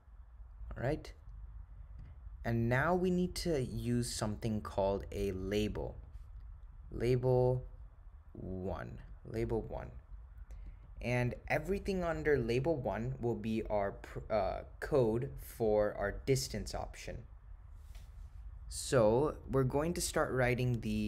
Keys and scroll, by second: 1.1 Return, 5.5 9, 8.8-9.6 typing, 10.8 Return.